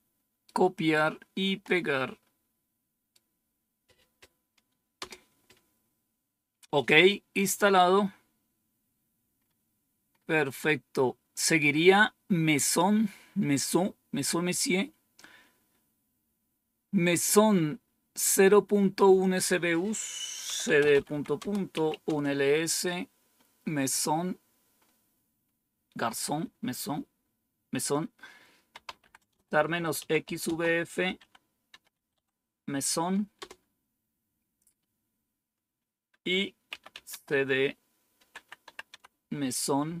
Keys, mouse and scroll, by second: 1.5-3.1 right drag, 4.9 Return, 7.3-8.2 scroll down 1, 9.3-10.0 scroll up 1, 10.0 scroll up 1, 12.5 click, 19.1 click, 20.1-22.3 typing, 28.4-32.3 typing, 36.3-40.0 typing.